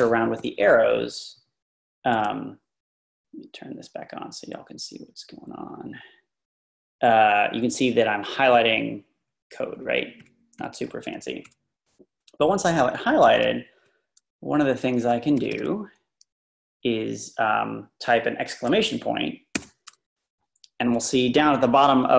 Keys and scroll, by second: 7.9 Down, 8.0 Down, 8.3 Down, 8.5 Down, 9.3 Up, 9.5 Up, 9.8 Up, 10.2 Up, 10.6 Up, 11.4 Down, 13.3 Up, 13.4 Right, 14.0-14.9 Right, 15.5 typing, 19.5 shift+1.